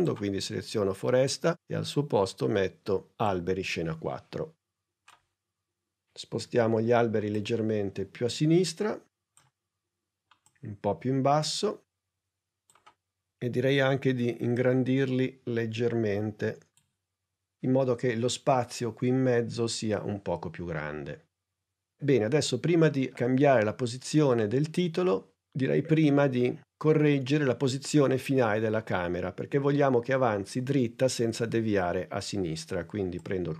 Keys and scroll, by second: 6.3 p, 13.5 s.